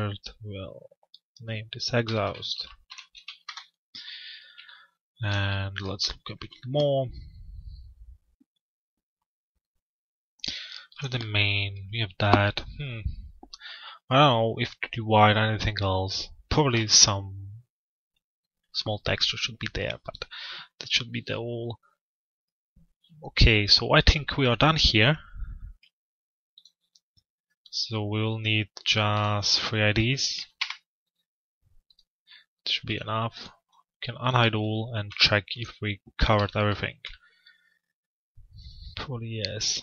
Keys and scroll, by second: 3.0 Return, 30.1 Return.